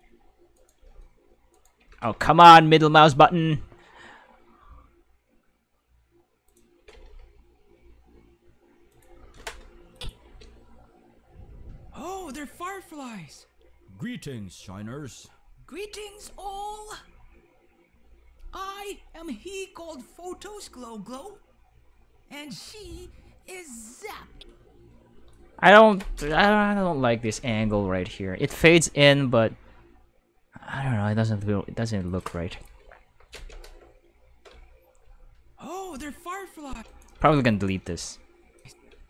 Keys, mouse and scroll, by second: 0.0-1.7 typing, 0.5 right click, 1.5 right click, 6.5 click, 6.5-7.4 typing, 8.9 click, 9.9 click, 10.2 space, 24.2 space, 25.3 click, 28.0-29.0 typing, 32.0 click, 33.3 space, 34.5 space, 35.0 space, 36.7 space, 36.7 5, 36.9 right click, 37.2 x, 37.2 click, 37.9 click, 38.5 click, 38.9 space.